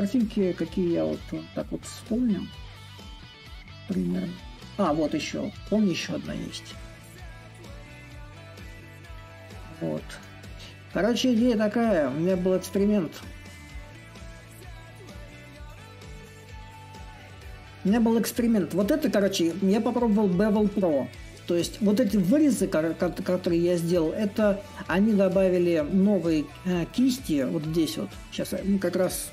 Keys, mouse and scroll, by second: 6.0-22.3 middle drag, 24.4-27.3 right drag, 27.3-29.3 drag.